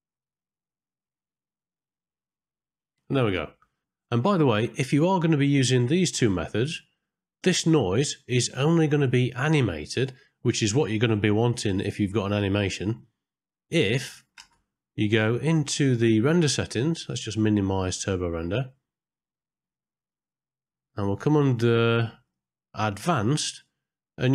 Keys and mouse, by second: 0.3-3.8 drag, 5.9 middle click, 14.1 click, 14.5 ctrl+space, 17.8 click, 20.8 middle click, 22.2 click.